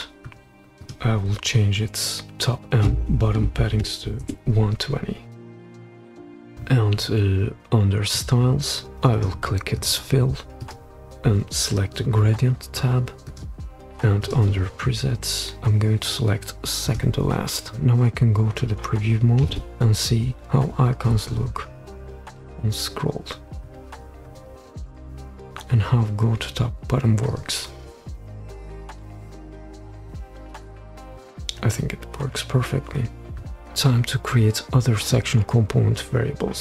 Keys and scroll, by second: 3.5-4.8 typing, 5.9 typing, 6.2 Return, 19.5 super+p.